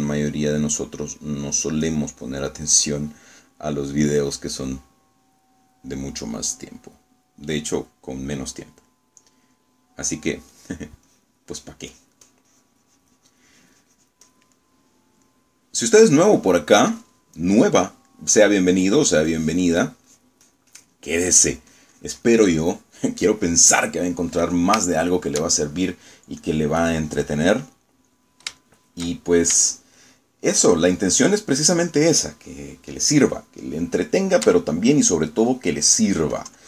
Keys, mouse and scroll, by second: 0.0 click, 0.6 click, 2.2 click, 2.6 click, 3.7 middle click, 10.0 middle click, 10.6 click, 11.6 click, 12.2 click, 12.6 click, 15.3 click, 15.6 middle click, 16.4-17.4 middle drag, 18.4 middle click, 19.2 middle click, 19.8 middle click, 20.4 click, 22.2 click, 23.6 middle click, 24.7 middle click, 25.2 middle click, 25.9-27.0 shift+middle drag, 27.5-29.6 drag, 29.7 shift+click, 30.8-31.8 shift+drag, 31.9-33.4 shift+drag, 34.9 shift+middle click, 35.6 shift+middle click, 36.4 shift+middle click.